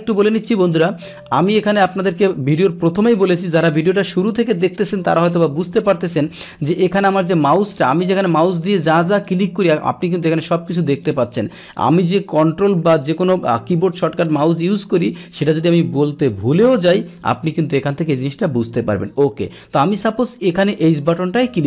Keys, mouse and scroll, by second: 0.4 click, 7.7 click, 8.1 click, 8.4 click, 8.8 click, 9.1 click, 11.0 click, 11.6 click, 16.5 click, 17.1 click, 19.0 click, 20.3 click.